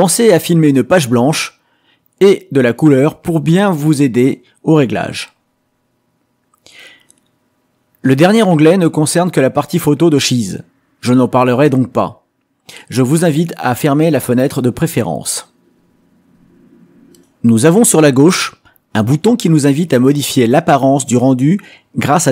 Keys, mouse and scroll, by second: 6.2 click, 11.3 click, 17.6 click, 19.4 click, 21.9 click.